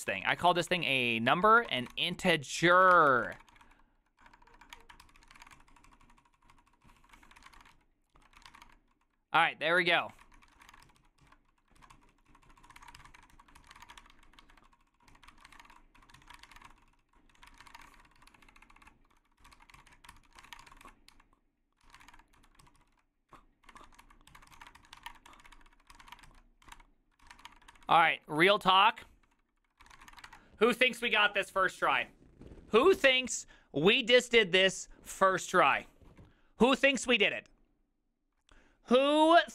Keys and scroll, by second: 0.0-27.9 typing, 2.8 ctrl+y, 4.8 Return, 5.1 ctrl+c, 7.2 ctrl+d, 8.2 ctrl+u, 9.9 ctrl+d, 10.1 ctrl+d, 10.3 ctrl+c, 11.3 ctrl+u, 14.5 ctrl+d, 22.7 ctrl+u, 22.9 ctrl+u, 23.0 ctrl+u, 25.6 ctrl+d, 25.8 ctrl+d, 27.9 ctrl+d, 28.1 ctrl+d, 28.2 ctrl+d, 29.0 ctrl+d, 29.8-30.6 typing.